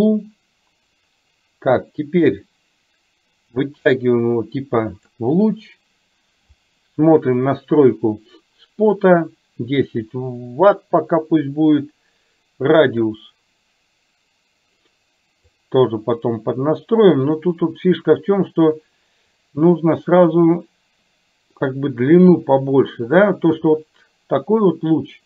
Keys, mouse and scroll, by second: 1.8-5.1 drag, 13.2-15.7 drag.